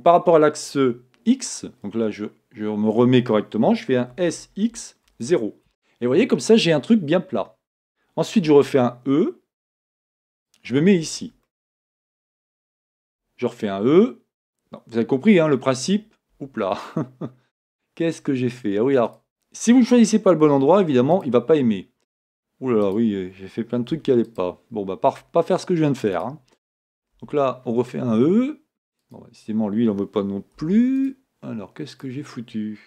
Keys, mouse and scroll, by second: 1.4 scroll up 1, 4.2 s, 11.5-19.2 shift+middle drag, 12.9 scroll up 1, 13.0 e, 16.9 scroll down 1, 17.4-19.2 scroll up 2, 19.2 click, 21.3 x, 23.0 click, 24.4 x, 26.3 click, 27.2 e, 32.1 click.